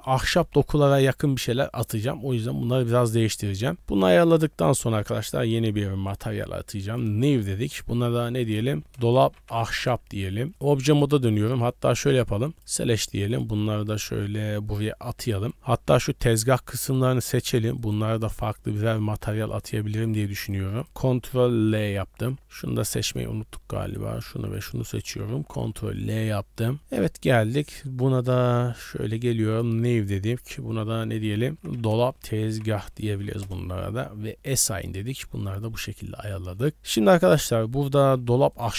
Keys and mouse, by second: 6.1 click, 6.9 click, 7.8-9.8 drag, 10.5 Tab, 11.3 Tab, 12.1 click, 13.3 click, 16.0 middle click, 16.6 click, 16.9 middle click, 17.8 shift+click, 18.4 shift+click, 18.8 middle click, 19.6 shift+middle click, 19.9 shift+middle click, 20.4 shift+middle click, 20.8 shift+middle click, 21.6 ctrl+l, 23.8 shift+middle click, 24.5 shift+middle click, 25.4 ctrl+l, 26.3 shift+middle click, 28.8 middle click, 29.5 middle drag, 30.4-31.5 middle drag, 31.5-33.4 drag, 31.5 BackSpace, 34.6 click, 35.4 Tab, 35.8-36.3 middle drag, 36.7 middle click, 38.2 Tab, 38.5 click.